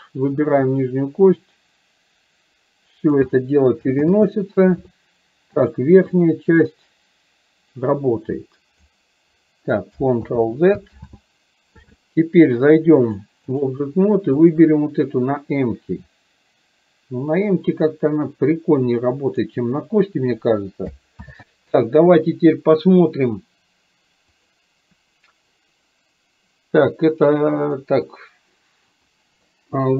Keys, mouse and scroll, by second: 0.9-3.3 drag, 6.8-8.9 drag, 13.0-13.8 drag, 14.4 click, 15.5-19.5 drag, 21.3 ctrl+z.